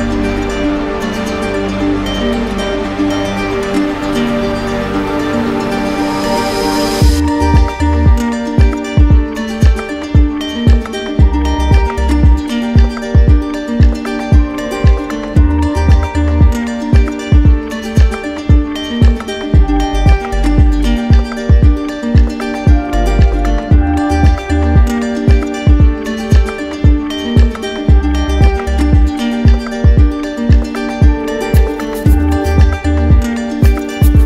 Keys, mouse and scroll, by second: 0.2 alt+click, 0.9 click, 2.3 click, 3.5 click, 4.3 click, 4.9 click, 5.3 alt+click, 6.1 click, 7.6 click, 8.2 alt+click, 10.1 click, 10.5 alt+click, 11.2 click, 12.8 click, 13.6 shift+click, 14.1 alt+click, 15.7-16.8 drag, 20.5 click, 22.5 click, 22.8 alt+click, 24.3 click, 25.5 click, 26.4 alt+click, 27.5 alt+click, 28.4-29.5 drag, 32.5 click, 33.7 alt+click.